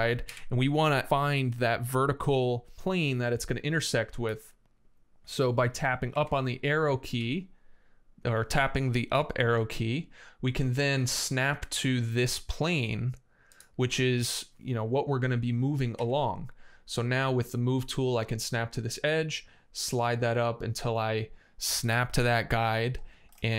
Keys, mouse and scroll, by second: 0.0 Up, 0.1-0.8 typing, 3.3 middle click, 5.9 Up, 6.1 t, 7.2 Up, 14.2 middle click, 15.7 m, 18.1 click, 22.8-23.1 scroll down 1, 23.1 space, 23.3 Escape.